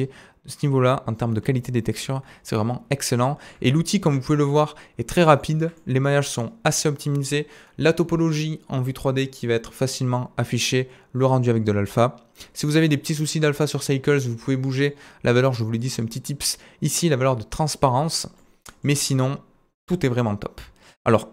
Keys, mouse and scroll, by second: 1.5 z, 2.8-3.1 scroll down 2, 3.3-5.7 shift+middle drag, 4.3-4.6 scroll down 1, 5.7-18.7 right drag, 14.7 click, 14.7 middle click, 15.8-18.7 drag, 15.8-18.7 middle drag, 16.3-18.1 scroll down 1, 18.1-18.5 scroll down 1, 19.0-19.6 scroll down 1, 19.6-20.5 scroll down 1.